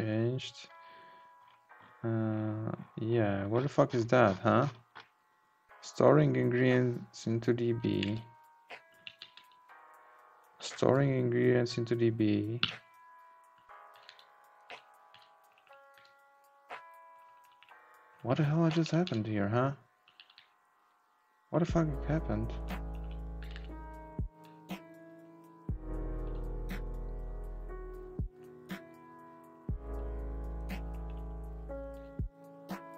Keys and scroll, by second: 13.9 Down, 15.9 Up, 16.2 Down, 17.1 Up, 21.7 Up, 23.4 Down, 23.5 Right, 24.9 Down, 28.4 Up, 31.2 Left.